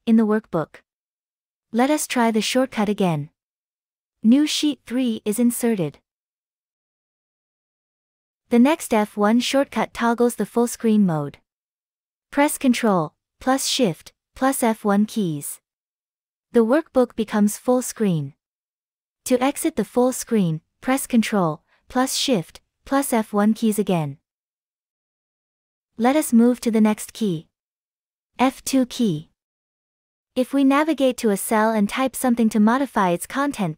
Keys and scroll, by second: 3.6 alt+shift+F1, 14.7 ctrl+shift+F1, 21.1 ctrl+shift+F1.